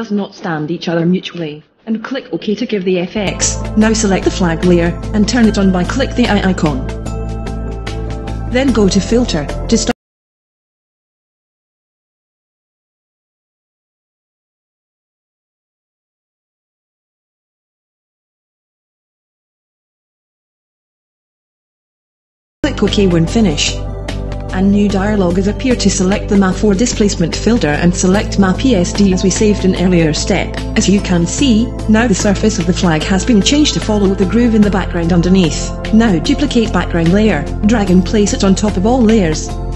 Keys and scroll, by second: 18.1 l, 19.2-20.1 typing.